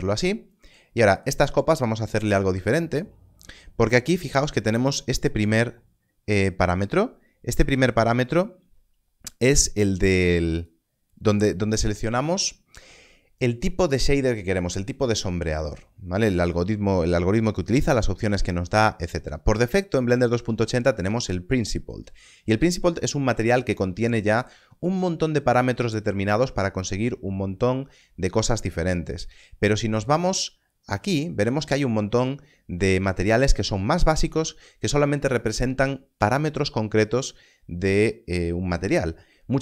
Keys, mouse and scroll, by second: 1.1 click, 10.5 click, 16.4 click, 24.5 click, 28.1-30.0 scroll up 1, 30.0 click.